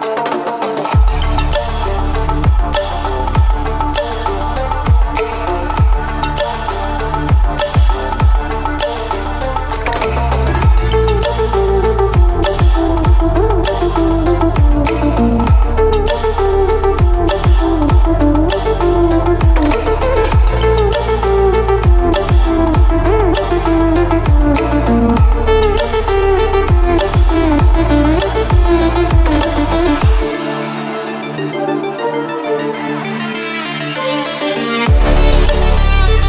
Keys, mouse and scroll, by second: 0.1-3.1 drag, 3.1 v, 4.9-7.3 drag, 8.2-9.3 typing, 9.4 Return, 11.5 click, 17.6 click, 21.4-29.1 drag, 29.4-36.2 drag.